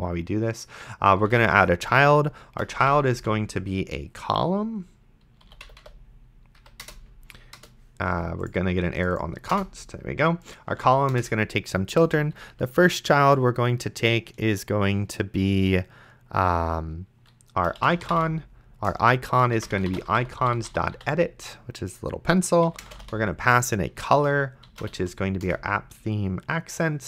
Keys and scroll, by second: 0.9-3.7 typing, 5.2-6.3 typing, 6.6 Down, 6.8 Return, 9.5 BackSpace, 10.7 c, 11.1 Return, 17.7-21.5 typing, 18.9 Return, 22.7 ,, 22.8 space, 23.0 o, 23.6 Return, 24.8 p, 25.5 Return.